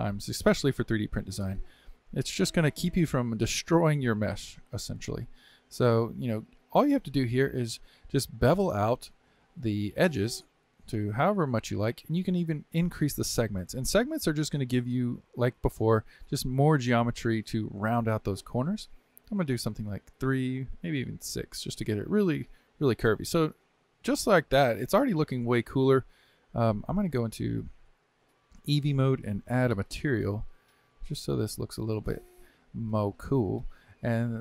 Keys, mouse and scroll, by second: 0.4-2.0 drag, 9.1-12.1 middle drag, 14.8-17.8 middle drag, 18.5-22.2 drag, 22.2-24.0 middle drag, 24.0-24.4 scroll down 2, 24.4-25.2 middle drag, 25.2-25.5 scroll down 2, 25.5-27.1 shift+middle drag, 27.1 click, 29.8 click, 30.9-32.8 drag, 32.8 scroll up 2, 33.2-34.4 middle drag.